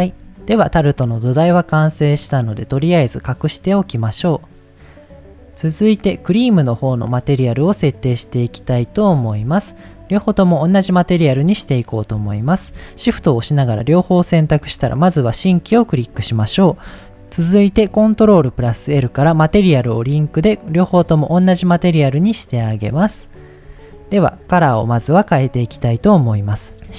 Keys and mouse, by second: 0.6-1.4 middle drag, 4.1 click, 6.0 click, 8.3 click, 8.9 shift+middle click, 10.2 middle click, 11.3 click, 14.9 click, 18.2 ctrl+l, 20.7 click, 21.6 click, 22.2 click, 23.3 shift+middle drag, 23.9 middle click, 24.8 middle click.